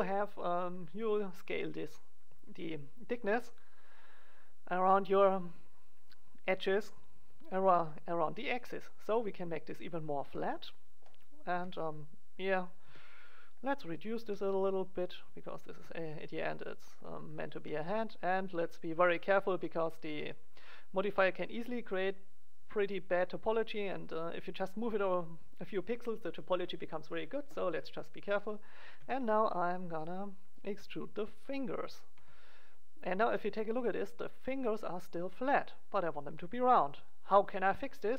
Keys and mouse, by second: 10.0 click, 10.5-11.5 drag, 11.5 KP_1, 12.6-14.2 drag, 12.8 g, 14.2-15.9 middle drag, 14.2 g, 15.7 g, 16.6 click, 16.7 middle click, 17.5 g, 18.5 click, 19.3 click, 20.0 g, 24.3-26.0 drag, 28.4 middle click, 28.9 e, 30.1 click, 30.5 middle click, 30.6 e, 32.1 e, 33.5 middle click, 36.7-38.1 drag.